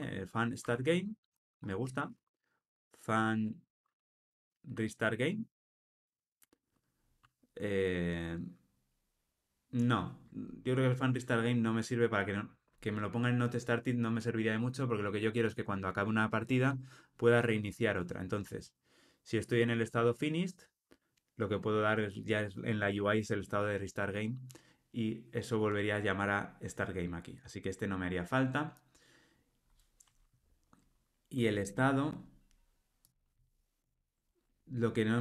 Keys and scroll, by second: 0.6 Tab, 33.9 super+b.